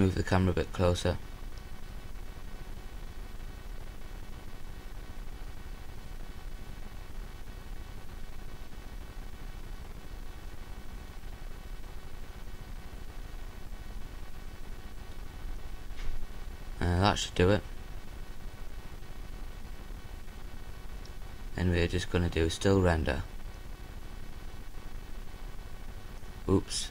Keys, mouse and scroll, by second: 2.3 right click, 3.5 g, 6.6-8.1 right drag, 6.9 g, 9.0-10.3 drag, 9.9 g, 12.7-13.9 drag, 12.7 g, 14.2 click, 15.0-16.5 drag, 15.3 g, 16.9-20.3 drag, 17.7 g, 18.9 g, 20.5 click, 21.2-22.7 drag, 21.2 g, 23.3-26.9 drag, 24.4 g.